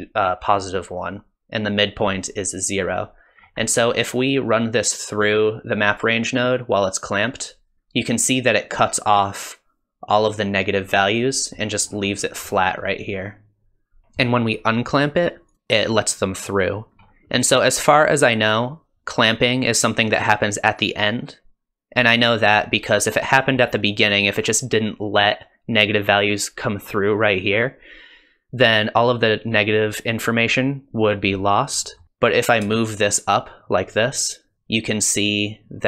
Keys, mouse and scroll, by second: 3.4 scroll up 3, 3.6 middle click, 4.1-5.2 scroll down 1, 5.2 click, 5.2-6.4 scroll down 1, 6.6 click, 7.8 click, 11.0 middle click, 11.8 scroll up 2, 12.1 middle click, 12.7 scroll down 2, 14.0 KP_1, 15.5 click, 17.0 scroll up 3, 17.4 middle click, 18.1 click, 23.0 click, 31.8 middle click, 32.0 click, 32.0 scroll up 2.